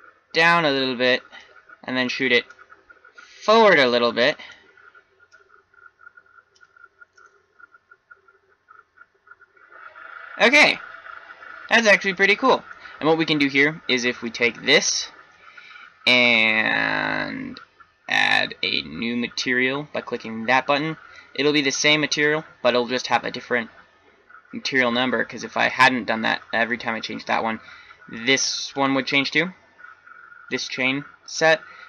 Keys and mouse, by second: 0.1 right click, 2.5-3.8 right drag, 4.3-5.3 middle drag, 5.6-7.0 drag, 7.0-7.7 middle drag, 8.0 middle click, 8.8-11.9 middle drag, 14.3-16.3 drag, 20.1-21.9 drag, 28.1-31.8 drag.